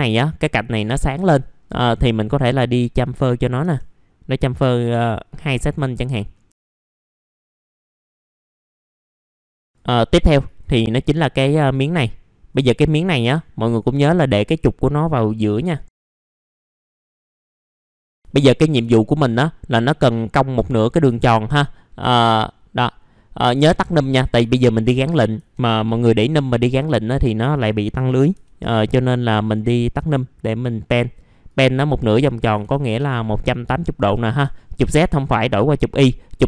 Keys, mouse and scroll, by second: 1.2-1.6 scroll down 1, 1.6-2.4 scroll up 1, 2.4 click, 3.0-3.6 scroll up 1, 3.6 F4, 5.3 click, 6.1 middle click, 6.5 F4, 6.5 scroll down 1, 6.8 right click, 7.1 click, 7.2 scroll down 1, 7.7 middle click, 8.1 f, 8.3 scroll down 1, 8.4 middle click, 8.5 scroll up 1, 8.7 middle click, 9.0 scroll down 1, 9.2 scroll up 1, 9.3 middle click, 9.4 scroll down 1, 9.5 scroll up 1, 9.7 click, 10.8-11.3 scroll down 1, 11.7 click, 12.7-13.2 scroll up 1, 13.2 F4, 14.3 click, 16.0 click, 17.0-17.4 scroll up 1, 17.4 click, 18.0 scroll down 1, 18.1 middle click, 18.2 alt+middle click, 21.1 scroll up 1, 22.0-23.1 scroll up 2, 23.1 middle click, 24.1 click, 24.5 alt+middle click, 27.5 click, 32.4 KP_1, 35.2 click.